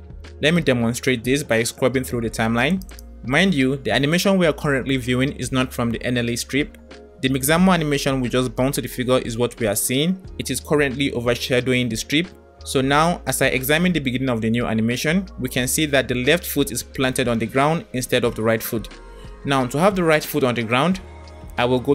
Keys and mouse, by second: 3.0-6.5 drag, 9.8-11.1 drag, 19.0 click.